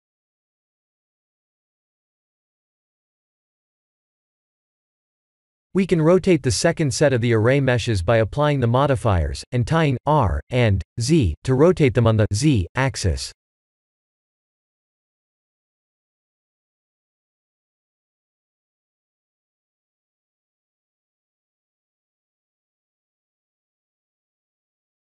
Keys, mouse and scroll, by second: 2.6 r, 4.1 ctrl+z, 5.1 click, 6.4 click, 7.5 click, 8.0 ctrl+a, 8.4 ctrl+a, 10.3 r, 16.1 KP_7, 19.5 r, 24.1 middle click.